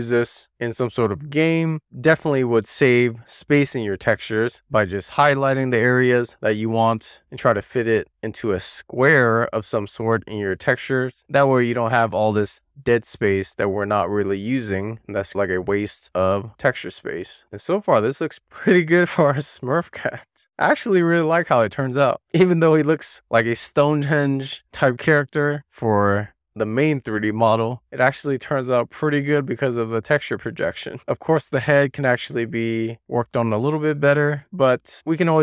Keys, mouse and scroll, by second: 0.0 scroll up 2, 0.2 scroll down 1, 0.2 shift+middle click, 0.5 click, 0.9 click, 2.5 click, 3.0-3.5 scroll down 3, 3.1 middle click, 3.5 shift+middle click, 3.7 scroll up 2, 3.9 shift+middle click, 4.3 scroll down 1, 4.4 click, 5.6 click, 5.9-6.4 scroll up 2, 6.6 click, 7.3 scroll down 2, 7.4 click, 8.2 click, 8.3 scroll up 1, 8.5 click, 9.1 click, 9.4 shift+click, 9.7 shift+click, 11.5 scroll down 2, 11.6 click, 12.5 scroll down 3, 12.8 shift+middle click, 13.0-13.4 scroll up 5, 13.4 click, 14.1 middle click, 14.4 scroll up 2, 14.7 super+z, 14.8 middle click, 14.9 super+z, 15.1 super+z, 15.2 super+z, 17.2 scroll down 1, 17.4 shift+middle click, 18.0-20.5 middle drag, 21.0-21.3 scroll down 1, 21.3 middle click, 22.7-23.6 scroll down 4, 23.7 shift+middle click, 25.0 middle click, 26.5-27.8 middle drag, 28.1-28.6 scroll up 1, 28.6-29.0 scroll down 1, 29.0 middle click, 30.2-31.0 scroll up 1, 31.0 shift+middle click, 33.0 middle click, 34.0-34.3 scroll down 1, 34.4 shift+middle click, 35.2-35.4 middle drag.